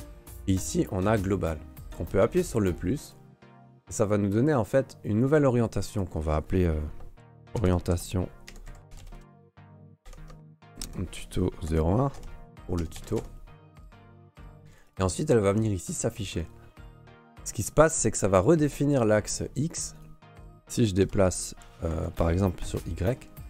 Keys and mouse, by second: 0.6-13.9 drag, 14.2 click, 14.9-16.2 drag, 18.0-18.7 drag, 19.0 Escape, 19.9 right click, 21.0 g, 22.6 middle click, 23.0 g, 23.1 g.